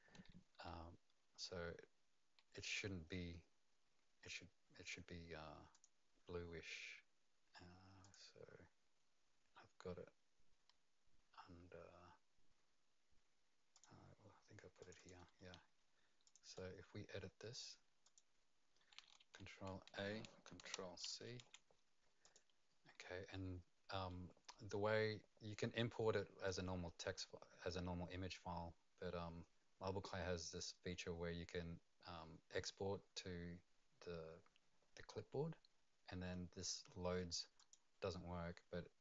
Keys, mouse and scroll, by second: 5.7 click, 8.0 click, 13.7 click, 14.8 click, 14.9 click, 16.2 click, 16.5 right click, 18.0 click, 19.2 ctrl+a, 21.0 c, 22.2 click, 37.6 click.